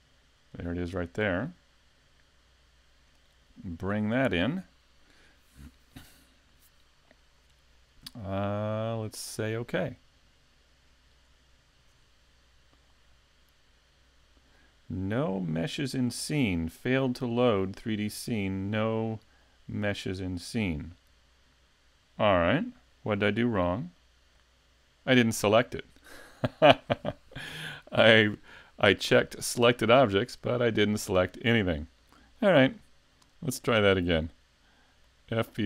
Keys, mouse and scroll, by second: 30.8 right click, 32.7 click.